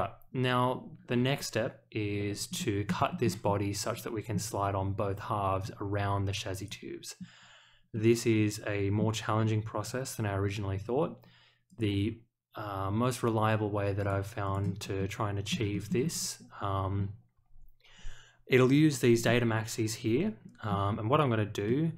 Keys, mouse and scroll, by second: 2.5 middle drag, 3.1 shift+middle click, 3.4-4.3 middle drag, 6.5 click, 7.9-8.9 middle drag, 11.6 click, 14.0 click, 14.4 click, 14.9-15.5 middle drag, 15.7 shift+middle click, 16.1 click, 19.2-20.6 middle drag, 21.6-21.9 middle drag.